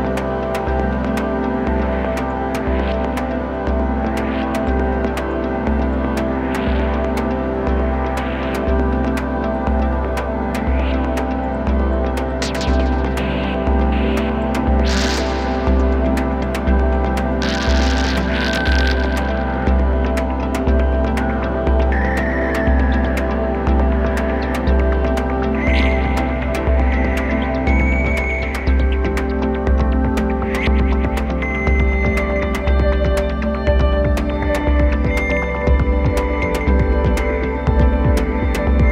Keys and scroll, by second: 2.4 super+z, 2.5 space, 20.4 t, 21.4 t, 22.2 space, 23.2 space, 35.4 super+z, 35.8 space.